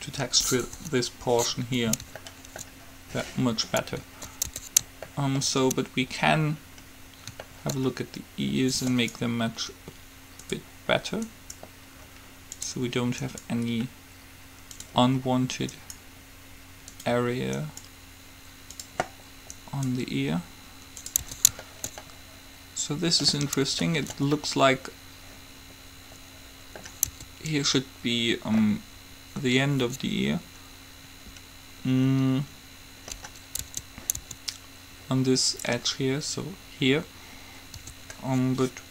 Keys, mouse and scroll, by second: 0.9 KP_3, 4.7 Tab, 5.2-6.7 middle drag, 9.2-11.0 right drag, 11.5-13.2 right drag, 13.5-15.2 right drag, 15.9-19.6 right drag, 19.9-21.2 right drag, 21.5 Tab, 21.8-23.0 middle drag, 23.2-24.2 middle drag, 27.2 Tab, 33.8 Tab, 34.4 Tab, 38.0 Tab.